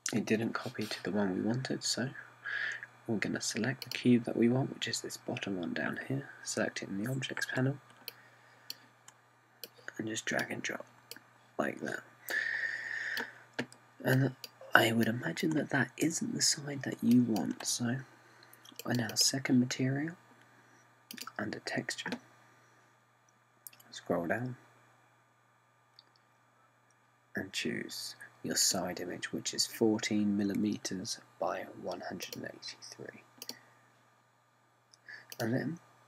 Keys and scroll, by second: 0.8 BackSpace.